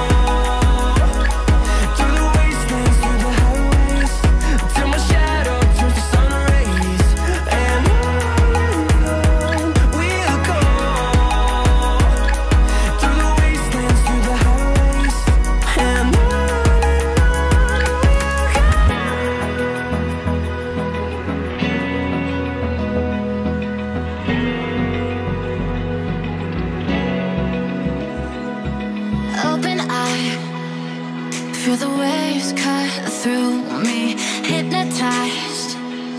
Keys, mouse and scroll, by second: 20.8 Escape, 26.3 Escape, 26.6 Escape, 29.1 Escape, 30.3 Escape, 31.2 double click.